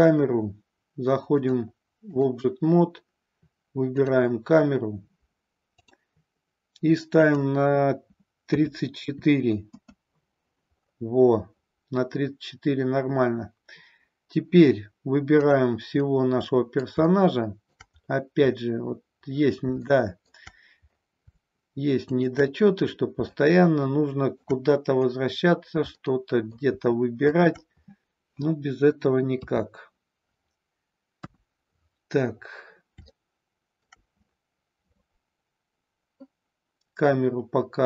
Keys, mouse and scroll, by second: 1.2-2.2 drag, 7.2-10.1 drag, 15.4 click, 15.9-16.9 middle drag, 17.0-17.8 shift+middle drag, 19.9-20.3 shift+middle drag, 22.1 shift+click, 23.3-24.5 shift+middle drag, 25.9-26.5 middle drag, 27.2 shift+click, 29.2 KP_3, 31.1 KP_1, 33.0-33.9 shift+middle drag.